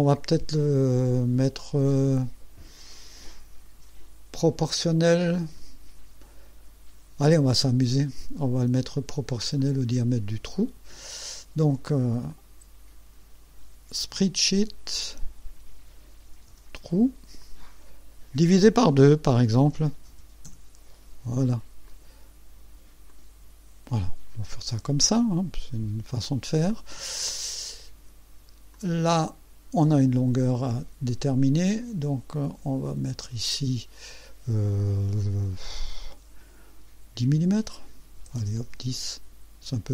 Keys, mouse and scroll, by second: 9.6 click, 12.3 click, 14.1 s, 14.9 click, 16.0-17.0 typing, 17.4 click, 20.1 KP_2, 20.5 KP_Enter, 21.9 click, 23.1 click, 24.0-24.3 scroll down 2, 28.7-30.0 drag, 30.6 click, 32.8 click, 38.2 KP_1, 38.4 KP_0, 38.7 KP_Enter.